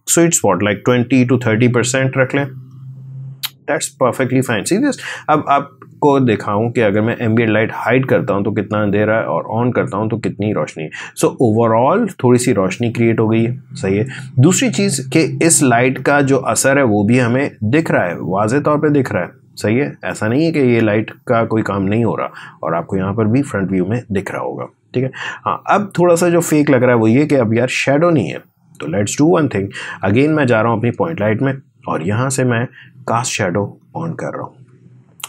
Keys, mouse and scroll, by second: 2.5 click, 7.1 click, 15.7-23.1 drag, 30.7 click, 33.5 click.